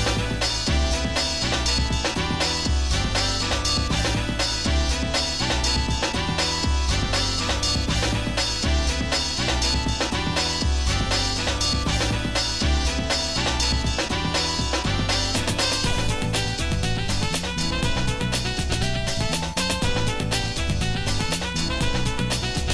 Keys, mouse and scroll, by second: 0.6 g, 8.9 middle click, 9.4 scroll down 1, 9.7 middle click, 11.0 ctrl+m, 14.1 g, 18.6 middle click, 19.7 middle click, 20.6-20.9 scroll up 2, 20.9 scroll down 1, 21.1 scroll up 1, 21.6 middle click.